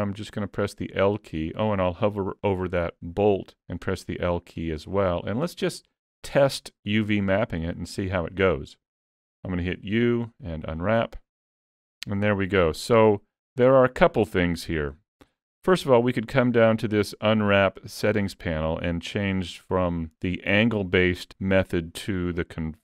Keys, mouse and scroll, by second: 0.0 l, 5.1-6.1 scroll down 2, 5.5 middle click, 7.5-8.1 scroll up 1, 9.7 u, 16.5 click, 22.0 click.